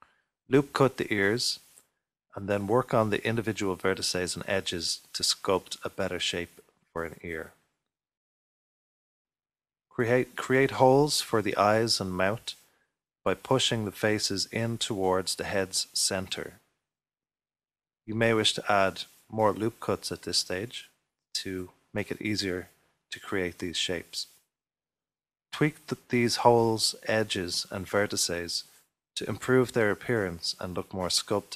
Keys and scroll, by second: 5.5-6.6 typing, 9.1-10.1 typing, 11.2 ctrl+r, 14.0 3, 16.7 3, 20.5 ctrl+r, 21.1 ctrl+r, 22.6 ctrl+r, 23.1 ctrl+r, 27.4-28.4 typing.